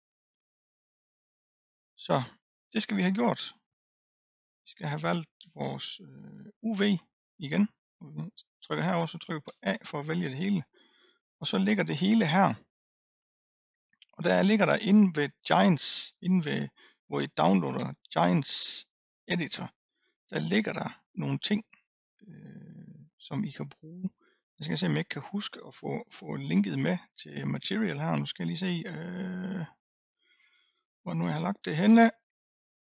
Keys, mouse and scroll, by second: 0.4-1.8 scroll up 1, 1.8-2.7 scroll down 2, 6.5 click, 8.4 click, 9.5 a, 10.6-13.1 scroll up 6.